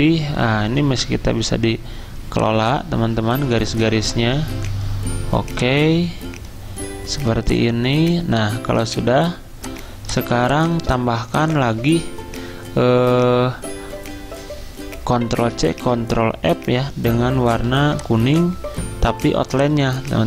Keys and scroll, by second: 0.9 ~, 15.4 ctrl+c, 15.7 ctrl+f, 17.6 i.